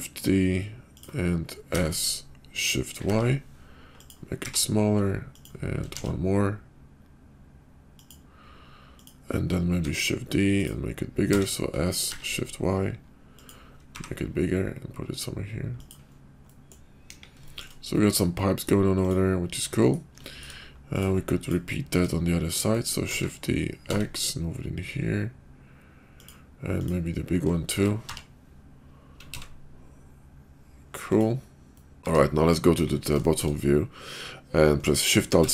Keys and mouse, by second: 1.5 s, 4.2 g, 5.9 shift+d, 9.7 shift+d, 11.2 s, 13.8 g, 16.5 middle click, 17.0 KP_5, 17.9 middle click, 18.4 middle click, 19.6 middle click, 20.2 shift+middle click, 20.8 click, 23.1 shift+d, 26.7 click, 27.7 shift+d, 31.6 middle click, 32.0 x, 32.0 `, 32.0 `, 32.7 KP_5, 33.3 shift+middle click, 35.3 alt+shift+c.